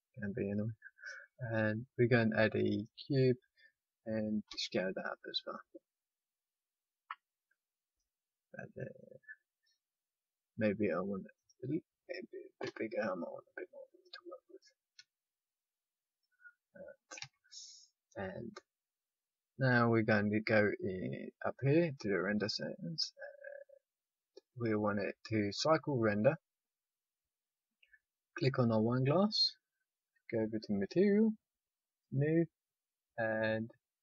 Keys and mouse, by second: 2.7-4.4 drag, 4.4 s, 8.3-12.6 middle drag, 12.6 click, 12.6 s, 14.5-17.1 drag, 14.9 s, 17.1 a, 17.7-19.5 middle drag, 26.2-28.5 middle drag, 28.5-34.0 drag.